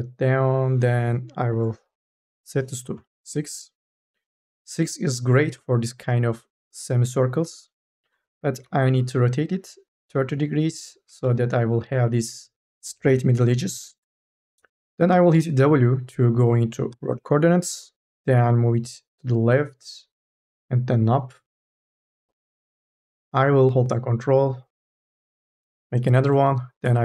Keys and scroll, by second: 2.8 KP_6, 3.1 Return, 8.5 r, 11.1 e, 14.0 ctrl+z, 16.7 w.